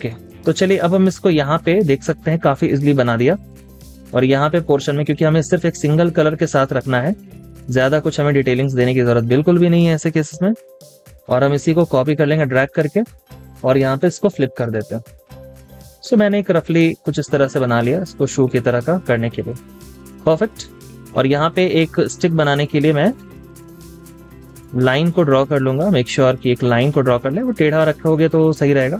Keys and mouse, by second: 4.1 space, 11.1 typing, 13.1 alt+click, 15.5 space, 19.2 double click, 19.6 z, 20.8 double click, 25.3 double click.